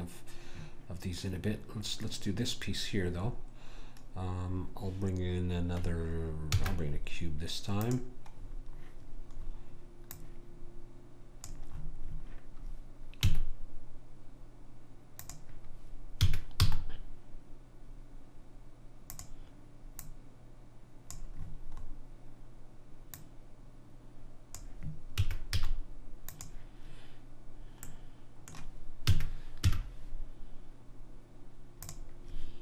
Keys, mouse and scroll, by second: 3.2-6.5 middle drag, 6.5 shift+a, 8.4-10.1 middle drag, 10.1 click, 13.2 s, 16.2 s, 20.0 click, 21.8-23.1 middle drag, 23.1 click, 25.2 s, 27.9-29.1 middle drag, 29.1 s.